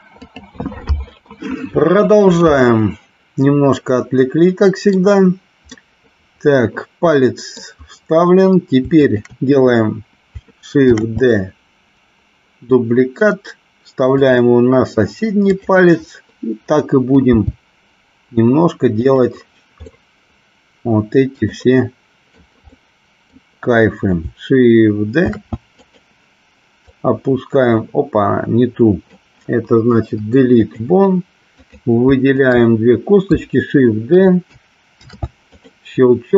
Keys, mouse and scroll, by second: 3.8-4.9 middle drag, 3.8 scroll up 1, 5.8-7.7 middle drag, 8.9 shift+click, 11.1 shift+d, 15.6 click, 17.4 g, 19.1 click, 19.9-21.6 middle drag, 21.7 middle click, 22.7 middle click, 25.3 shift+d, 25.8 click, 26.9-29.2 drag, 29.9 Delete, 31.7 click, 32.4 shift+click, 35.1 shift+d, 35.6 click.